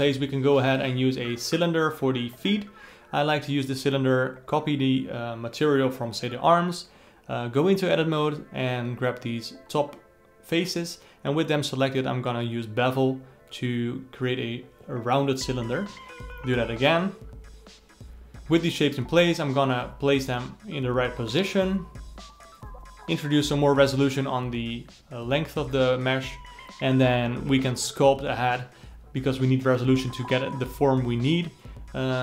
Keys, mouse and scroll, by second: 0.0 g, 0.7 alt+a, 1.0 click, 1.4 g, 3.1 shift+click, 3.8 ctrl+l, 6.5 alt+a, 6.8 click, 7.4 Tab, 7.7 alt+middle click, 8.1 3, 8.2 click, 8.7 alt+middle click, 9.2 shift+click, 9.5 alt+middle click, 10.4 ctrl+b, 14.2 a, 14.6 s, 16.1 shift+click, 16.2 ctrl+b, 20.8 Tab, 21.1-22.3 alt+middle drag, 22.3 KP_1, 23.0-23.7 scroll up 4, 23.7 g, 25.1 Tab, 25.4 ctrl+r, 28.2 Tab, 28.4-30.9 alt+middle drag, 31.8 Tab.